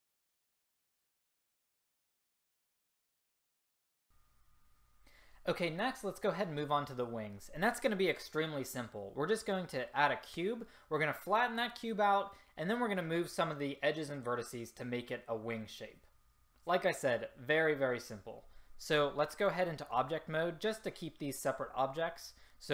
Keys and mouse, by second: 0.4 click, 0.9 ctrl+z, 1.7 s, 2.1 a.